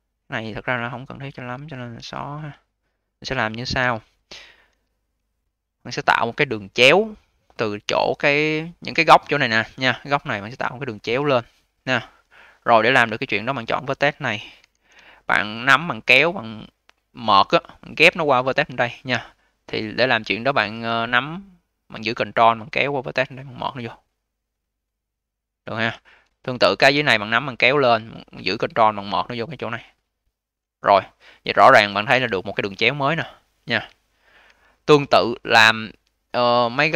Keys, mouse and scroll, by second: 1.8 q, 2.2-3.7 scroll up 7, 3.7 q, 4.6 1, 5.6 click, 8.1-8.6 scroll up 2, 8.6-11.6 alt+drag, 13.3 click, 14.5 w, 14.9-20.7 alt+drag, 20.9 click, 26.4 click, 27.1 click, 31.1 click, 32.0 2, 32.3 click, 34.3 1, 34.9-36.2 scroll down 5, 36.2-36.9 scroll down 2.